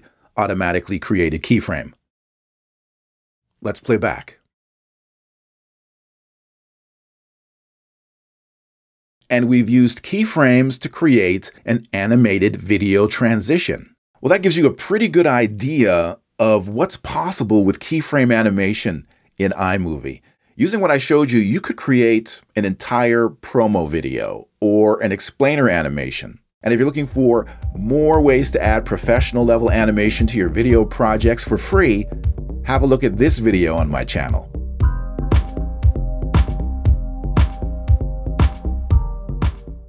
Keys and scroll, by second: 2.0 m.